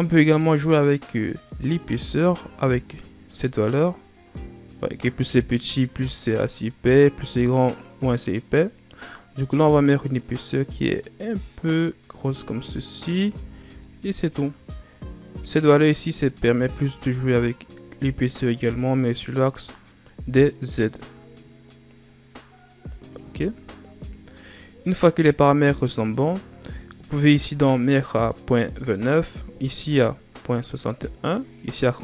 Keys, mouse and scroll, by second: 1.7-4.7 drag, 16.4-19.4 drag, 23.5-24.9 scroll down 2, 24.9-29.6 middle drag.